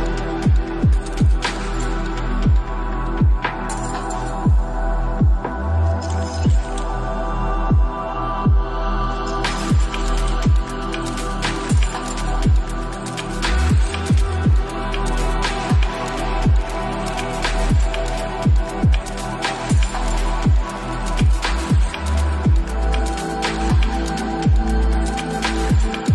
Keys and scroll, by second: 13.4 BackSpace, 13.9 shift+8, 17.8 ctrl+s, 20.8 ctrl+s.